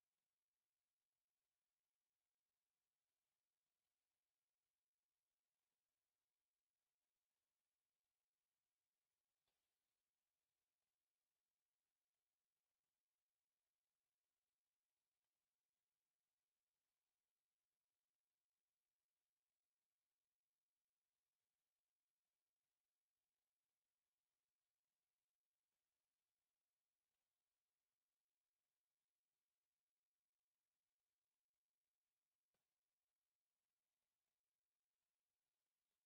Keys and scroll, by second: 0.8 Escape, 1.2-2.5 typing, 3.4 Escape, 3.8-8.9 typing, 4.4 Escape, 5.5 Escape, 6.1 Escape, 7.0 Escape, 7.9 Escape, 8.6 Escape, 9.7 Escape, 9.9 x, 10.0 space, 10.1 f, 10.2 space, 11.1 Escape, 11.7 space, 12.2 Escape, 12.7 m, 12.8 space, 13.3 Escape, 13.7 m, 13.8 space, 14.2 F8, 14.8 Escape, 15.2 m, 15.3 space, 15.8 Escape, 21.9 c, 23.8 s, 24.0 space, 24.2 Escape, 24.4 e, 24.7 space, 26.8 space, 28.4 F8, 29.4 u, 29.4 space, 30.1 s, 30.5 space, 30.9 Escape, 32.8 Escape, 34.5 Escape, 34.7 e, 35.3 Escape, 35.9 c.